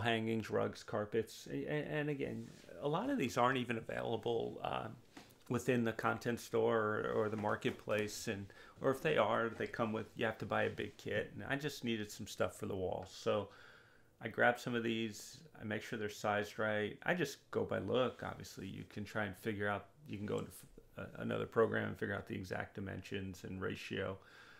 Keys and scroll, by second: 2.9 0, 3.1 Return, 6.7 r, 18.3 w.